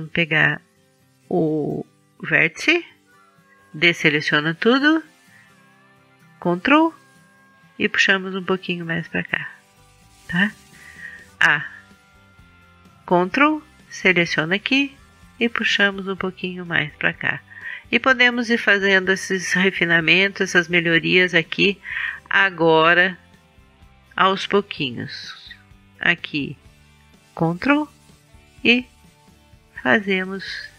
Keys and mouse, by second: 2.4-5.7 middle drag, 4.2 a, 5.7-7.6 drag, 7.6 middle click, 7.9-9.9 drag, 9.9-13.3 middle drag, 11.3 a, 15.2 middle click, 17.4-21.0 middle drag, 20.4 Tab, 21.2 Tab, 23.7 a, 26.3 middle click, 28.9 middle click.